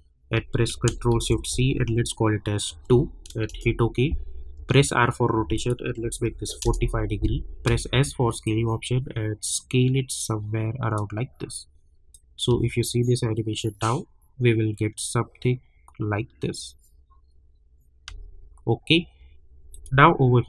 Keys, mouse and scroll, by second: 1.1 ctrl+shift+c, 2.7 2, 3.5 Return, 4.5 r, 5.5 click, 6.6 Return, 7.6 s, 8.4-12.1 drag, 12.5 space, 18.0 space, 19.7 click.